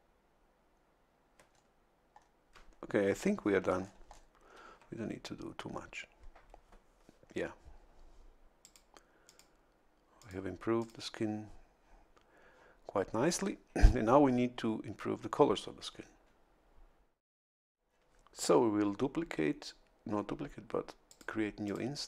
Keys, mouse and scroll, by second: 1.5 ctrl+scroll down 2, 2.1 ctrl+scroll up 2, 3.7 a, 3.8 scroll down 2, 4.3-4.8 scroll down 1, 8.6 click, 9.2 click, 10.2 click, 10.8 click, 21.0 click, 21.6 click.